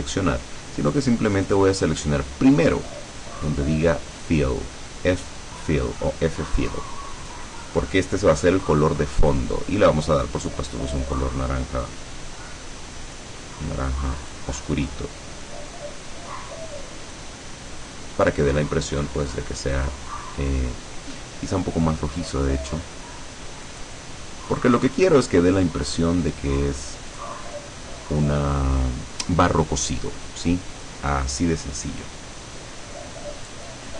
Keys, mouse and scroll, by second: 1.5 click, 7.3 click, 10.6-13.5 drag, 14.3 click, 14.9-17.5 drag, 23.8 click, 24.9 click, 27.2 click.